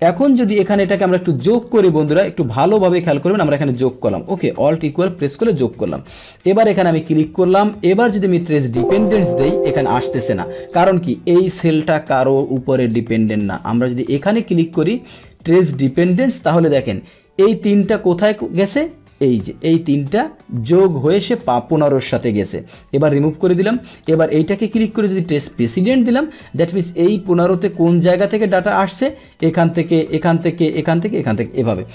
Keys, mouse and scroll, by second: 0.7 Right, 0.9 Right, 1.3 Right, 2.1 Right, 3.0 click, 5.0 Return, 6.4 click, 8.5 click, 10.7 click, 14.0 click, 15.4 click, 23.0 click, 24.0 click, 25.6 click, 31.7 Return.